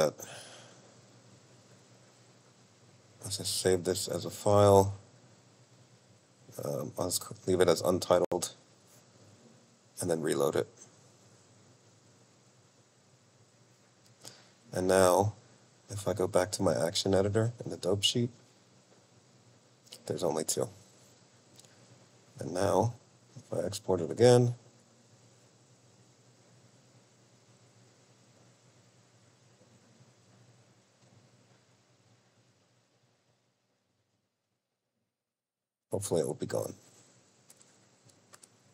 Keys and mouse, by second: 1.7-3.4 drag, 10.2-13.0 drag, 16.0-17.7 drag, 19.4-21.3 drag, 21.8-24.7 drag.